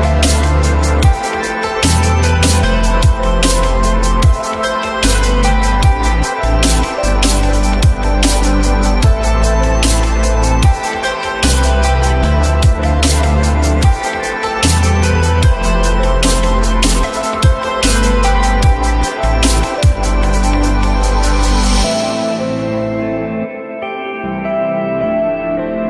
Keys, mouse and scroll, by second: 2.4 alt+middle click, 3.3 alt+middle click, 3.6 alt+middle click, 4.5 alt+middle click, 5.8 ctrl+BackSpace, 9.0 ctrl+a, 12.9 4, 13.1 Return, 18.6 F4, 22.6 alt+middle click, 24.2 alt+middle click.